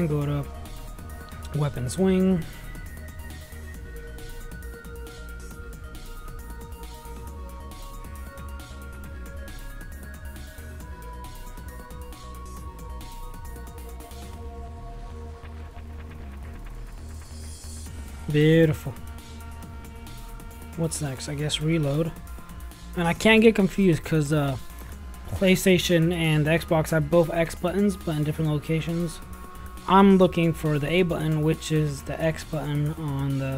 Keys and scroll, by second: 12.1 space, 12.7 ., 12.7 /, 12.9 Up, 13.9 /, 15.9 ctrl+z, 16.2 ctrl+x, 16.4 ctrl+c, 17.0 ctrl+v.